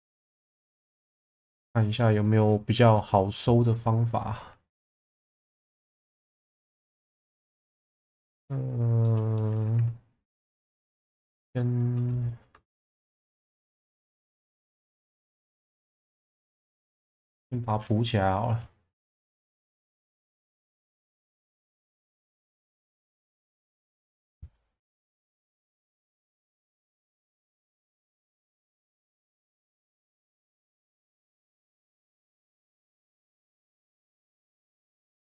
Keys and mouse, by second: 0.7 shift+v, 1.7 click, 3.4-4.9 middle drag, 5.3 middle click, 5.8 ctrl+z, 6.2-7.4 middle drag, 7.6 shift+middle click, 8.1 middle click, 9.0 middle click, 9.7 2, 10.5 alt+middle click, 19.3-22.7 drag, 24.0-26.2 drag, 27.9-29.2 middle drag, 31.9 Tab, 32.5 middle click, 34.3 click, 34.7 middle click.